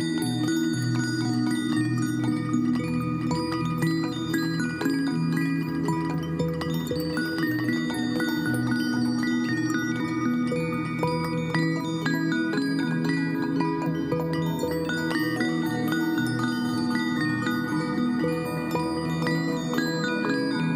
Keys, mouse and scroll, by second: 11.0-11.4 typing, 13.7 ctrl+a, 18.2 ctrl+d.